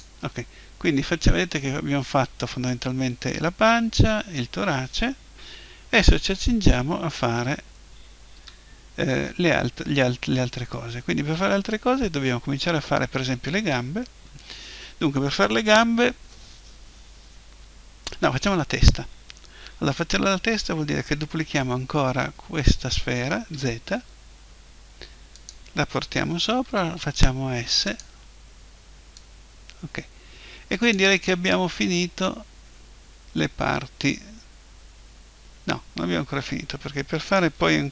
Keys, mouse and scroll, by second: 0.3-2.3 middle drag, 5.7 KP_1, 7.2 KP_5, 8.4 KP_5, 21.9 shift+d, 25.5-27.4 drag, 26.5 s, 28.0-30.9 drag, 31.9-33.8 middle drag.